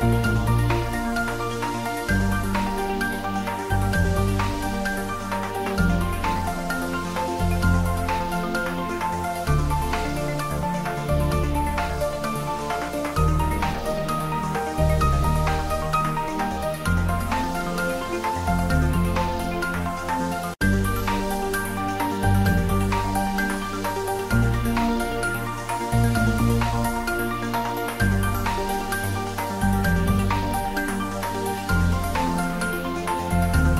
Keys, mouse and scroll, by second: 0.3 shift+click, 2.4 shift+d, 2.6 z, 4.5 click, 4.7 ctrl+z, 5.5 shift+click, 5.7 shift+middle click, 6.2 shift+click, 6.5 shift+middle click, 7.0 shift+d, 7.3 z, 8.7 click, 8.8 middle click, 9.3 ctrl+z, 10.3 shift+click, 11.5 middle click, 12.4-13.2 typing, 14.5 click, 14.8 ctrl+z, 15.2 middle click, 15.8 i, 18.1 click, 18.4 e, 19.3 click, 19.5 middle click, 20.2 ctrl+z, 20.7 Tab, 20.9 middle click, 21.3 Tab, 21.5 middle click, 21.9 Tab, 22.8 ctrl+r, 23.7 click, 25.2 click, 26.0 f, 26.5 Tab, 26.7-29.1 middle drag, 29.1 Tab, 29.4 middle click, 29.7 Tab, 30.0 middle click, 30.7 ctrl+z, 32.0 middle click, 32.4 Tab.